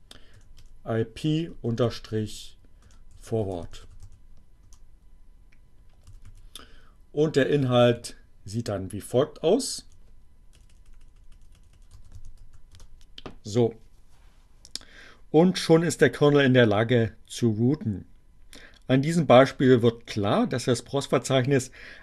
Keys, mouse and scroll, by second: 0.0-4.5 typing, 6.0 Up, 6.7 Down, 7.9 Left, 10.1 Delete, 12.0 c, 12.4 t, 12.8 Return.